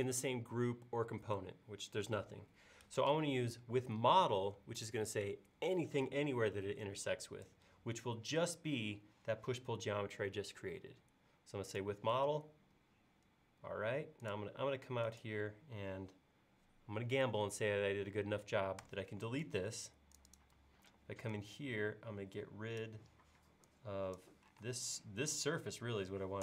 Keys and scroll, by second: 18.9 BackSpace, 20.9 e, 24.7 space.